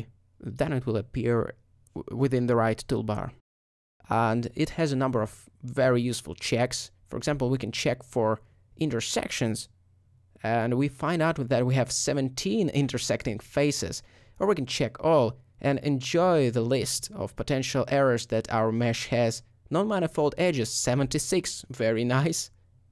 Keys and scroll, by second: 3.2 alt+a.